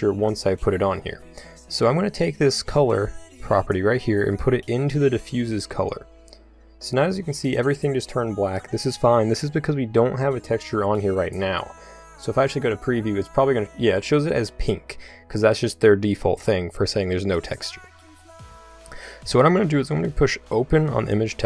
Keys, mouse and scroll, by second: 3.0-5.9 drag, 12.6-21.4 drag.